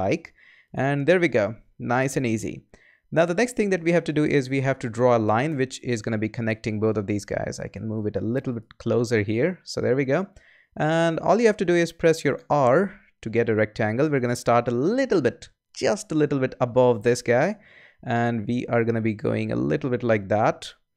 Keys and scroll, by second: 12.3 r.